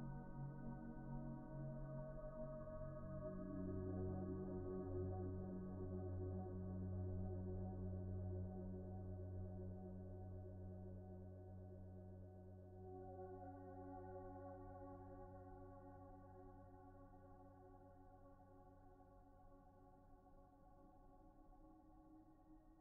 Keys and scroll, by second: 0.0 b, 0.7 b, 3.0 p, 4.1-4.9 typing, 9.2 F4.